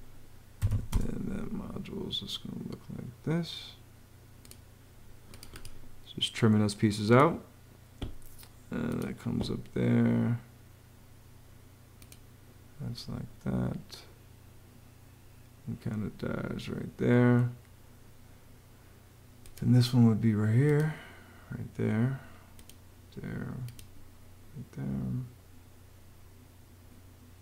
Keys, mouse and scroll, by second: 0.5 r, 0.7 space.